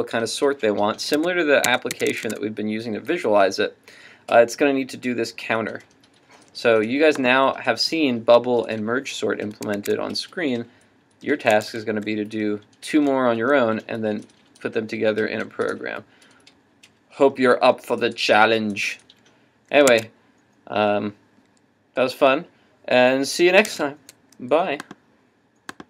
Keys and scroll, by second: 1.2 super+Tab, 9.8 super+Tab, 11.6 super+Tab, 19.9 super+Tab, 23.7 super+Tab.